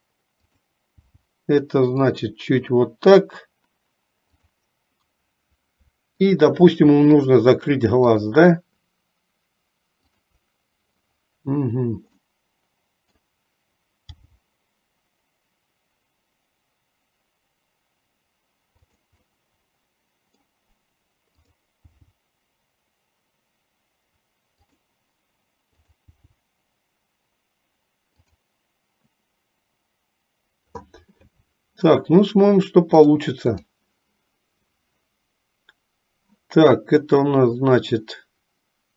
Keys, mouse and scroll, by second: 4.4 click, 6.3 shift+click, 7.1 shift+click, 8.2 shift+click, 10.2 shift+click, 12.3-13.4 middle drag, 19.3-20.5 middle drag, 25.9 click, 33.3 click, 37.4-38.9 drag.